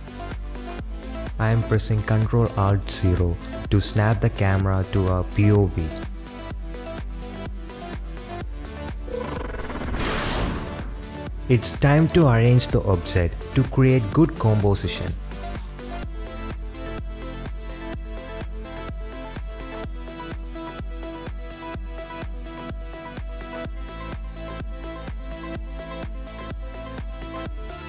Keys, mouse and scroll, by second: 0.0 n, 1.8 ctrl+alt+KP_0, 4.3 shift+click, 5.1 n, 5.3 click, 5.8 middle click, 6.1 KP_Decimal, 6.4 click, 7.0 KP_Decimal, 7.7-8.2 drag, 8.5 click, 8.7 ,, 8.9 click, 9.1 shift+click, 9.5 middle click, 9.6 click, 10.0 shift+middle click, 13.0 click, 13.3-13.9 middle drag, 14.5 g, 16.0 KP_7, 17.4 g, 19.9 r, 21.3 s, 23.1 g, 25.1 r, 27.3 g.